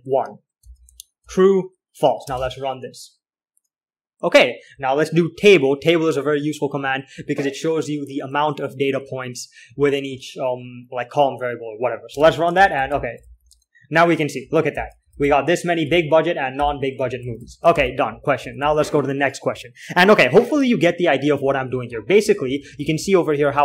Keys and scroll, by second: 0.8-3.2 typing, 6.8 typing, 10.1 l, 10.3 l, 12.5-19.1 typing, 21.0 alt+4, 21.8 alt+3, 22.2-23.6 typing.